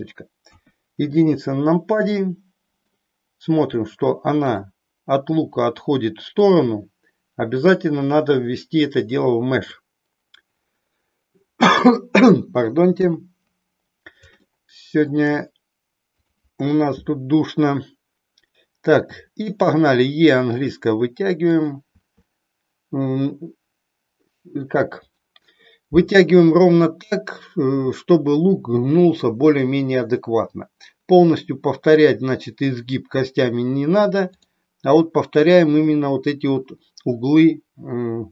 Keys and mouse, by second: 0.5 KP_1, 2.2 middle click, 7.8-9.7 drag, 12.9 KP_3, 14.5 shift+middle click, 16.2 click, 18.9 e, 34.3 click.